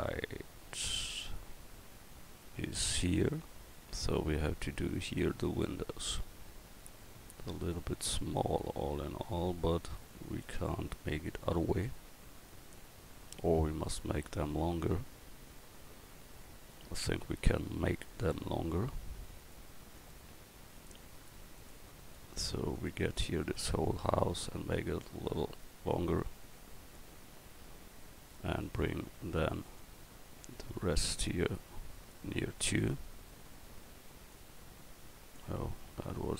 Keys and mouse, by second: 17.2 Tab, 17.8 Tab, 18.1 right click, 18.3 Tab, 19.4-21.6 right drag, 24.4 right click, 28.3 Tab, 28.6-36.3 right drag.